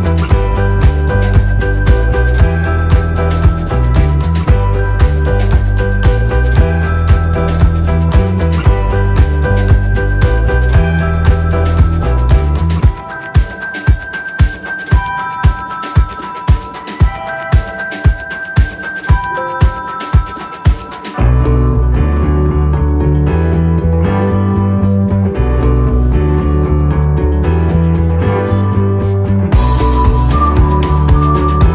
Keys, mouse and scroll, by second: 4.3 click, 5.0 click, 6.2 click, 8.7 space, 8.8 click, 13.0 click, 19.9-22.5 scroll down 1, 22.5 click, 27.3 click.